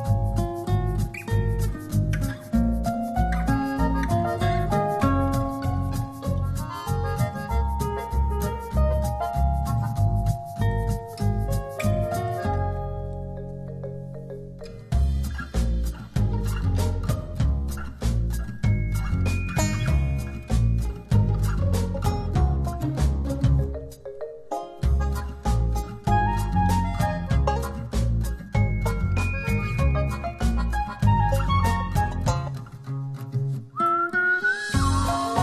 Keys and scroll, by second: 0.7 space, 16.7 super+z, 21.9 Up, 22.1 Left, 22.2 Up, 22.5 Up, 23.1 Left.